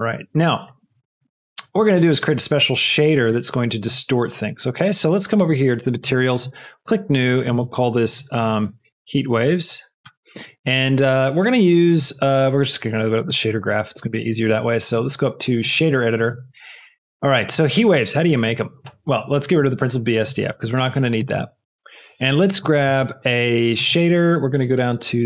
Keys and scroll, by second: 8.7-9.8 typing, 10.0 Return, 19.6 x, 21.5 shift+a.